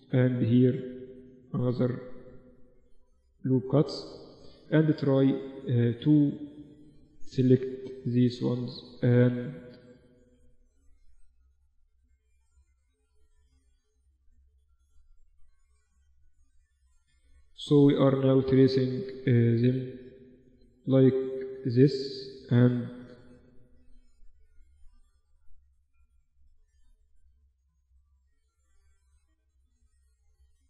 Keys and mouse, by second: 3.2-7.5 middle drag, 7.5 click, 7.5 g, 9.4-16.6 drag, 9.7 g, 11.0 g, 12.4 g, 13.0-14.9 right drag, 13.7 g, 16.4 middle click, 17.6-18.8 middle drag, 17.8 a, 18.8 middle click, 19.0 middle click, 21.4-22.5 middle drag, 22.5 g, 24.2 g, 25.8 right click, 28.8 g, 30.0-30.6 drag, 30.3 a.